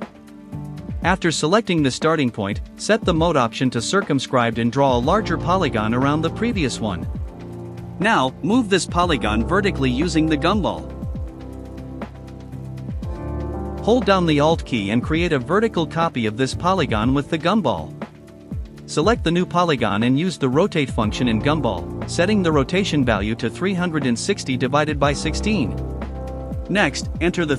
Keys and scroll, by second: 0.5 KP_0, 0.7 Return, 24.1 Return.